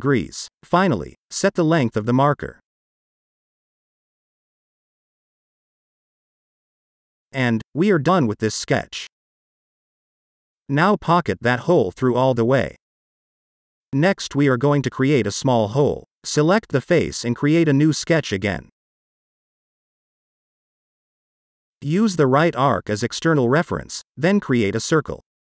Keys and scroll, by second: 3.1 shift+d, 4.4-6.4 typing, 6.4 Return.